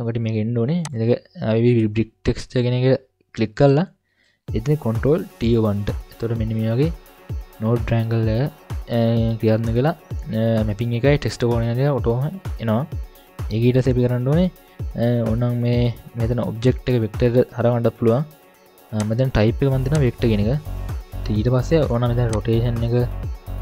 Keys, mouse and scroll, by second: 0.3 scroll up 1, 0.8 click, 0.8 scroll up 3, 5.5 ctrl+t, 9.0-9.4 scroll up 1, 11.4-12.0 scroll down 1, 12.1 middle click, 12.1 scroll down 3, 13.0 scroll up 1, 18.9-20.1 drag, 22.3-23.6 drag.